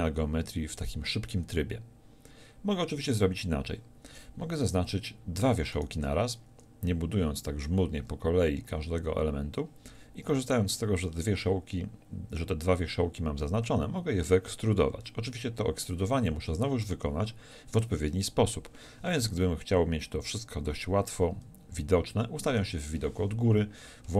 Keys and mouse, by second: 22.5 KP_7, 23.2 z.